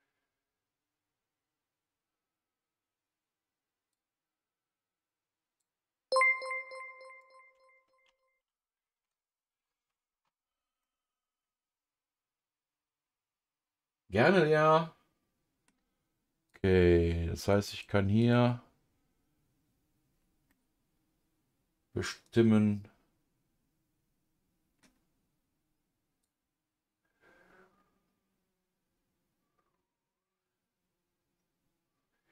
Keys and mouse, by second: 3.9-6.1 drag, 6.5 click, 8.0 ctrl+z, 8.4 ctrl+z, 8.9 ctrl+z, 10.8-15.7 middle drag, 16.5 click, 17.7 click, 20.5-24.8 middle drag, 26.2-32.3 drag.